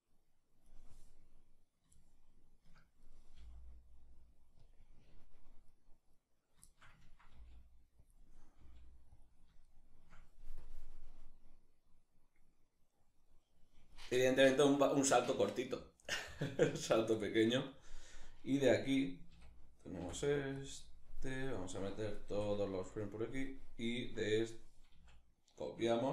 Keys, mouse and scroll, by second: 1.6-4.3 shift+middle drag, 2.7 right click, 3.0 g, 4.3 click, 5.3 right click, 5.8 right click, 6.3-7.7 ctrl+shift+middle drag, 7.0 g, 7.7 click, 8.2 g, 8.8 click, 9.3-10.2 shift+middle drag, 10.2-26.1 drag, 18.9 a, 19.6 i, 22.6 i, 24.6 a.